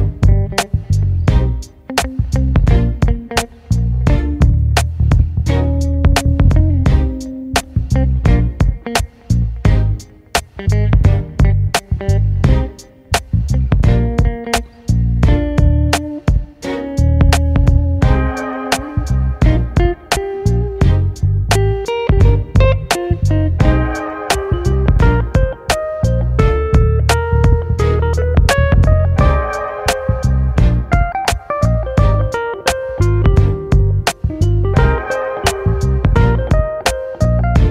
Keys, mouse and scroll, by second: 0.3-2.0 middle drag, 2.0-3.5 drag, 3.5-4.6 middle drag, 4.6 s, 7.3 click, 7.7 middle click, 8.5 s, 10.0-12.0 middle drag, 12.8 click, 13.3-14.4 middle drag, 14.4-15.5 drag, 15.5-17.8 middle drag, 17.8-18.6 scroll down 1, 18.6-18.9 scroll down 1, 18.9-20.8 shift+middle drag, 20.8 click, 21.1-21.6 shift+middle drag, 21.6 click, 22.9-24.1 drag, 24.1 shift+middle click, 24.4-24.9 scroll up 5, 24.9 shift+middle click, 25.8-27.1 scroll down 1, 27.1 click, 27.6-29.2 middle drag, 29.2-30.3 scroll down 6, 30.3 shift+d, 31.7 p, 33.6-35.6 drag, 35.9 click, 37.0-37.7 drag.